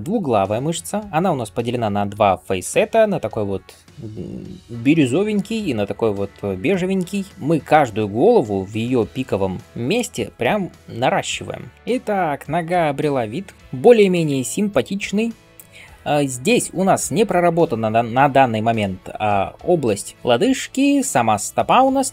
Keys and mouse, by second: 14.3-20.0 shift+drag, 17.0-20.0 middle drag, 17.0-20.0 right drag.